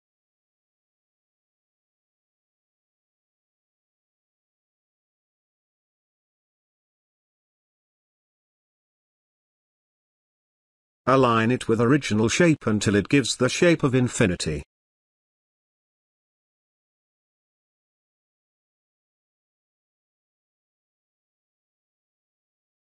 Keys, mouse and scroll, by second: 2.9-6.3 drag, 8.5-12.5 drag, 13.1 ctrl+space, 13.3 ctrl+click, 13.6-14.2 ctrl+space, 13.9 ctrl+space, 14.9 ctrl+click, 14.9-15.5 ctrl+space, 15.9 ctrl+click, 17.8 Left, 22.0 BackSpace.